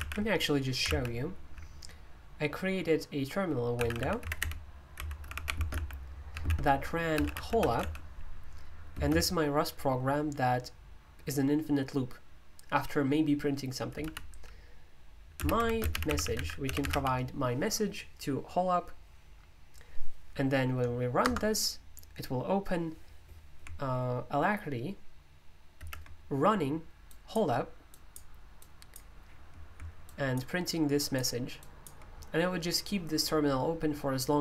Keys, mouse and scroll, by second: 0.0 super+o, 0.9 alt+d, 3.5-8.9 typing, 14.0 typing, 15.4-17.3 typing, 21.2 Return, 27.8-29.3 drag, 30.1 ctrl+click, 31.0-32.2 ctrl+drag.